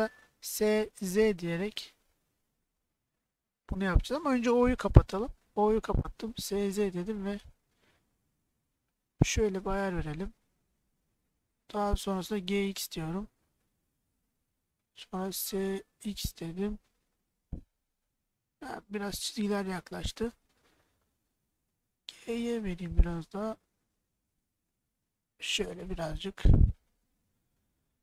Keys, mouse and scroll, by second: 0.4 s, 1.0 z, 4.0 click, 5.3 o, 6.3 s, 6.6 z, 9.8 click, 11.4 g, 12.2 x, 14.6 click, 15.3 s, 15.9 x, 20.8 click, 22.0 g, 22.6 y, 26.5 click, 27.1 middle click.